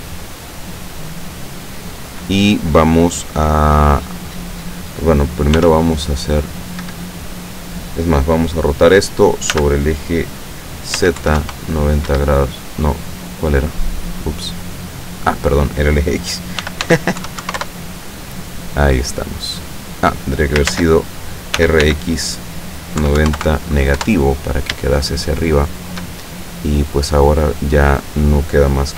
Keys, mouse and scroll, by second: 5.7 r, 6.9 Escape, 9.6 r, 11.1 z, 11.3 KP_9, 11.5 KP_0, 12.2 Escape, 14.2-15.7 middle drag, 16.7 r, 17.0 x, 17.3 KP_9, 17.5 KP_0, 17.7 KP_Enter, 18.8-20.2 middle drag, 20.8 ctrl+z, 21.7 r, 21.9 x, 23.1 KP_9, 23.3 KP_0, 23.5 KP_Subtract, 24.1 KP_Enter, 25.3-26.2 shift+middle drag, 26.3-27.9 shift+middle drag.